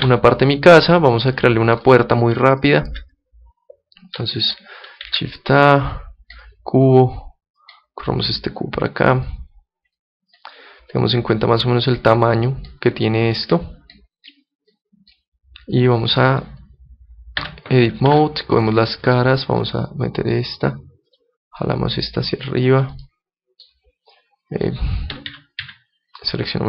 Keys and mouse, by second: 0.0 Escape, 0.9-5.1 middle drag, 5.1 shift+a, 7.6-11.2 drag, 11.0 middle click, 12.0-13.8 drag, 14.3-16.1 drag, 16.1-17.4 middle drag, 17.4 Tab, 18.1 ctrl+Tab, 19.0-20.7 right drag, 19.6-21.3 drag, 21.1 right click, 21.6-22.9 middle drag, 22.9 click, 23.0 middle click, 23.2-25.3 middle drag, 25.3 a, 25.6 a.